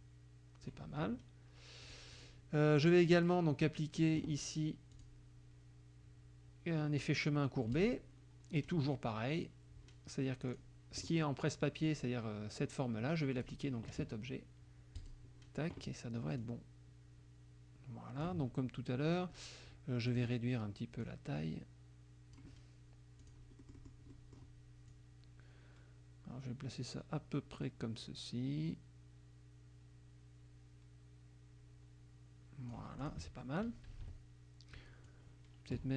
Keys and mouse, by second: 0.0 click, 1.9 click, 3.2 click, 4.9 click, 7.8 click, 10.6 click, 13.4 click, 15.0 click, 16.4-18.4 drag, 20.1 click, 21.1-22.6 drag, 23.2 click, 23.6 middle click, 24.9-33.0 drag, 33.1 click, 34.0 -, 35.1 click.